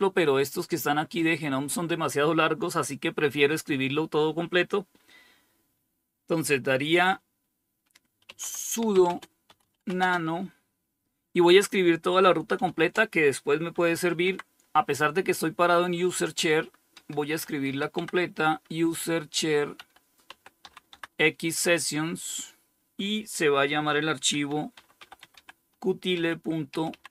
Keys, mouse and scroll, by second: 7.3-9.6 typing, 11.8-13.6 typing, 16.2-17.4 typing, 19.0-20.0 typing, 23.3-27.1 typing.